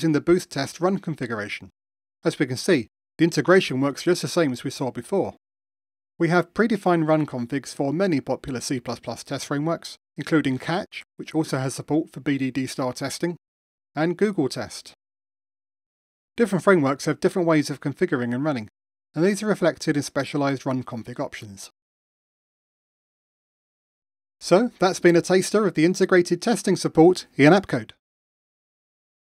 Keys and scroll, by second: 5.5 ctrl+alt+r, 9.8 super+4, 12.7 super+Return, 13.1 ctrl+alt+r, 14.2 ctrl+alt+r.